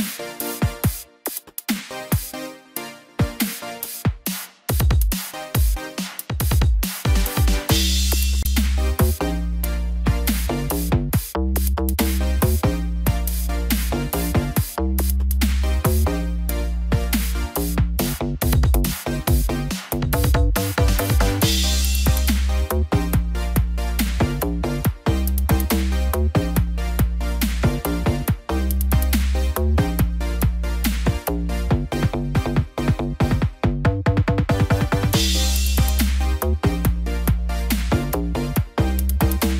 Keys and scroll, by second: 7.2 ctrl+t, 39.4 ctrl+t.